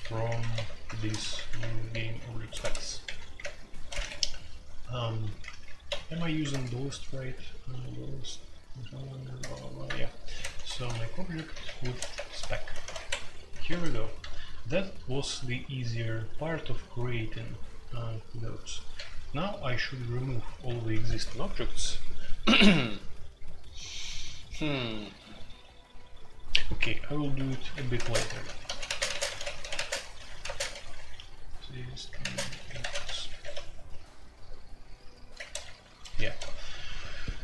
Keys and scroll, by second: 0.0-6.1 typing, 6.5 alt+n, 9.4 alt+n, 10.2-15.2 typing, 10.4 Tab, 12.9 Escape, 13.9 Escape, 18.9 typing, 20.6 typing, 27.3 Tab, 27.6-33.0 typing, 33.2 Escape, 33.4 F2, 36.3 ctrl+d, 36.8-37.4 typing.